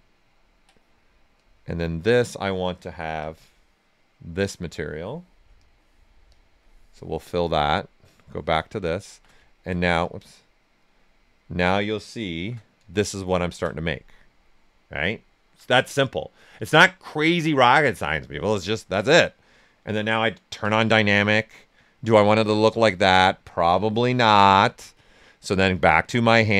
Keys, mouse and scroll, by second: 1.3-5.5 drag, 9.0 shift+g, 10.0 click, 10.8 right click, 12.3 shift+f, 12.6 right click, 13.7 right click, 18.3-20.6 alt+right drag, 20.6 d, 21.4-22.7 right drag, 22.7-24.1 drag, 24.1 click, 26.2-26.5 drag.